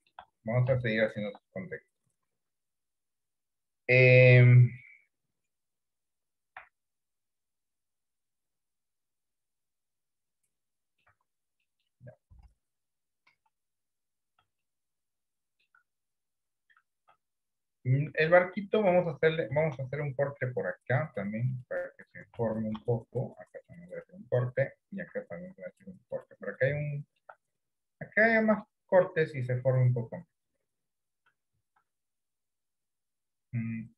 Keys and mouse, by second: 1.0 shift+middle click, 10.4 middle click, 11.2 Tab, 11.8 middle click, 12.4 KP_1, 13.5 KP_3, 14.7-15.7 shift+middle drag, 18.3 shift+middle click, 19.9 ctrl+r, 22.8 ctrl+r, 25.1 ctrl+r, 27.1 shift+middle click, 31.8 ctrl+r.